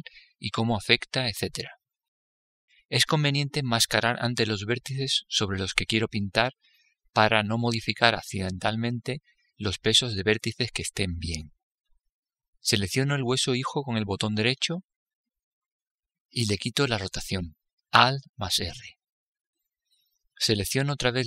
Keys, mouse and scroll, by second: 14.1-15.8 right drag, 19.0 alt+r, 20.6-21.2 middle drag.